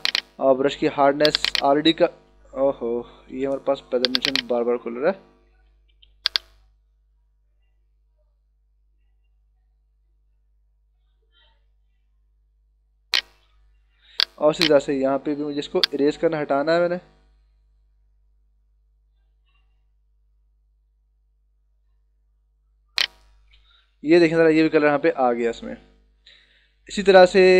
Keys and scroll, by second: 3.3 d, 4.4 space, 5.8 [, 14.0 h, 16.2 b, 23.9 ctrl+-, 25.6 ctrl+=.